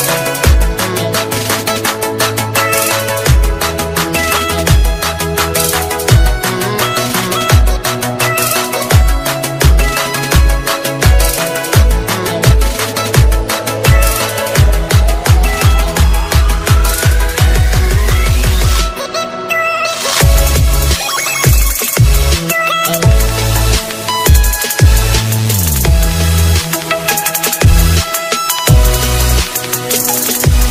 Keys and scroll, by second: 11.6 ctrl+alt+z.